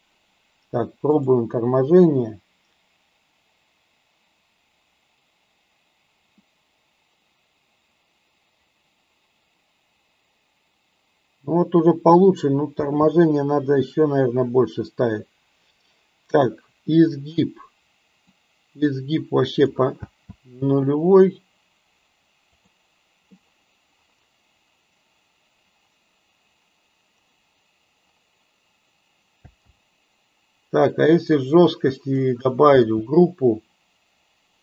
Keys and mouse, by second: 1.3 click, 14.0 space, 18.4-19.7 drag, 19.9 space, 22.7 click, 29.5 space, 30.9-32.1 drag, 32.7 space.